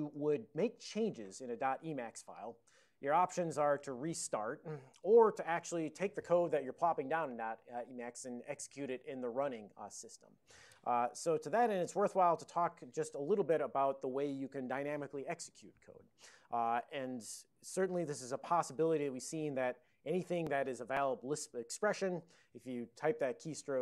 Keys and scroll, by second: 0.7 ctrl+n, 1.0 ctrl+n, 11.2 alt+n, 11.5 Tab.